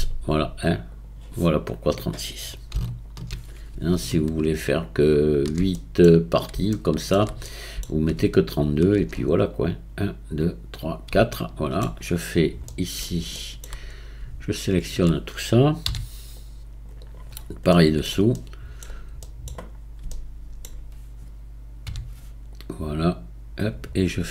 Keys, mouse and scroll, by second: 0.9-3.1 drag, 4.2 alt+shift+click, 5.0 alt+shift+click, 5.8-8.5 middle drag, 8.5 alt+shift+click, 11.3-13.9 shift+middle drag, 13.9-15.0 scroll up 2, 15.0-15.8 scroll up 2, 15.9 c, 17.4-17.7 scroll down 5, 17.8-19.8 middle drag, 19.8-20.1 scroll up 4, 20.1-21.9 shift+middle drag, 21.9 c.